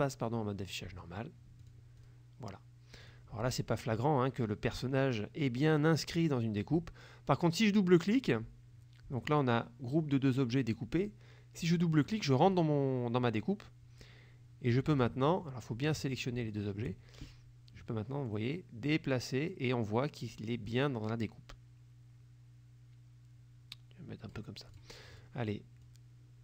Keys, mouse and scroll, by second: 1.7 click, 2.1 click, 3.1 click, 7.5 click, 12.0 click, 12.5 click, 16.1 shift+click, 17.3-24.6 shift+drag, 24.8 click, 25.2 click, 25.9-26.4 drag.